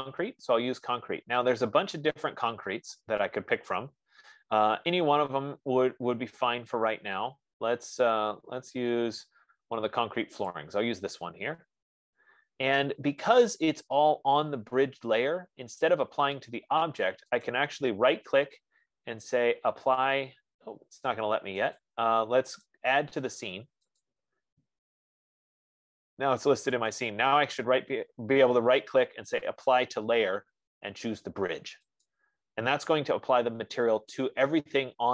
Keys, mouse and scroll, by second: 0.0-2.0 drag, 3.6-4.4 scroll, 7.2-8.8 scroll, 10.9 click, 11.0 F15, 17.9 right click, 22.3 click, 23.1 right click, 24.3 click, 27.2 right click, 32.6 click.